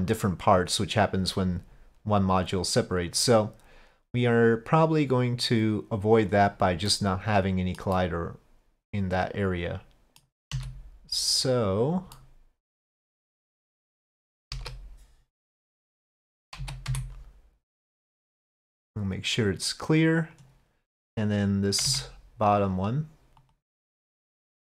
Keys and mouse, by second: 4.5-6.3 drag, 7.0-7.8 middle drag, 8.0-9.6 middle drag, 9.6 click, 10.6 s, 12.2-14.0 drag, 14.5 KP_5, 14.6 KP_1, 16.6 z, 18.8-20.4 drag, 21.9 Tab, 23.5 click, 24.2 click.